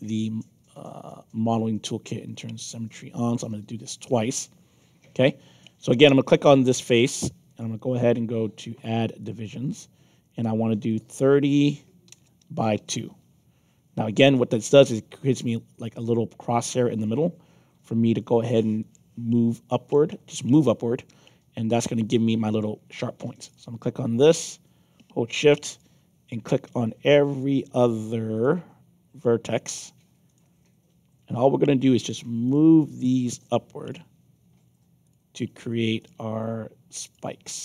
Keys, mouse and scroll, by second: 2.5 click, 3.8 click, 5.0 F7, 6.0 click, 7.4 click, 9.2 click, 10.8 click, 12.4 Tab, 13.0 Tab, 14.6 middle click, 18.1 middle click, 19.9-21.7 right drag, 22.0 middle click, 23.4 click, 25.7 shift+click, 26.6 shift+click, 27.2 shift+click, 28.3 shift+click, 29.1 shift+click, 30.2 shift+click, 31.2 shift+click, 32.4 shift+click, 33.8 shift+click, 35.0 shift+click, 35.9 shift+click, 37.0 shift+click.